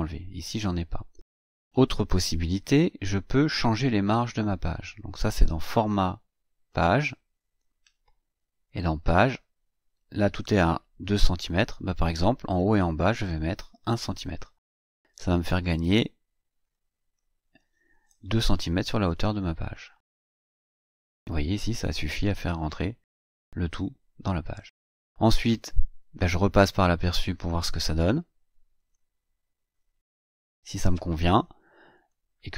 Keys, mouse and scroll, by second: 1.0-5.0 scroll up 4, 5.0 click, 6.5 click, 8.5 click, 12.6 click, 14.1 KP_1, 14.9 click, 16.5 click, 17.3 KP_1, 19.5 click, 20.1-21.8 scroll down 4, 21.8-22.1 scroll up 1, 28.6 click, 31.7 click.